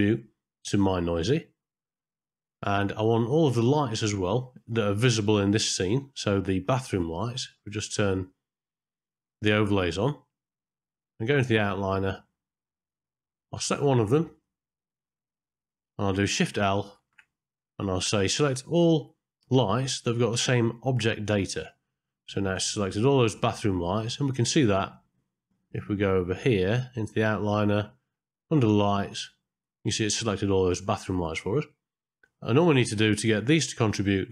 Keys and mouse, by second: 4.0 click, 7.6 click, 10.3 middle click, 11.9-12.9 drag, 14.3 click, 17.0 shift+l, 22.7-23.7 middle drag, 24.5-28.0 middle drag, 29.6 middle click, 32.7 click.